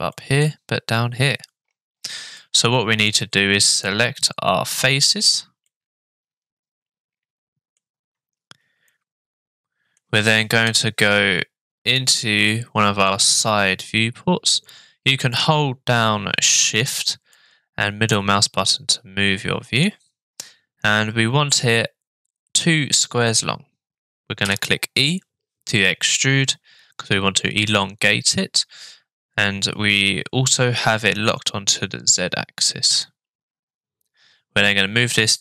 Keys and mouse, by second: 0.1 middle click, 2.4 middle click, 4.2 shift+click, 5.7-7.8 middle drag, 8.9-10.0 middle drag, 17.3-19.8 shift+middle drag, 24.4 e.